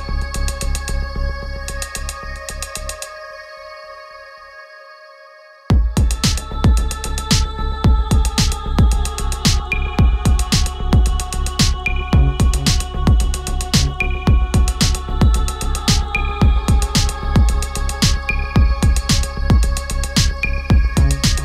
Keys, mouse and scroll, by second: 0.5-7.3 alt+drag, 8.2 ctrl+t, 9.4-12.6 drag, 12.6 ctrl+z, 13.9-19.5 ctrl+drag, 19.5 Down.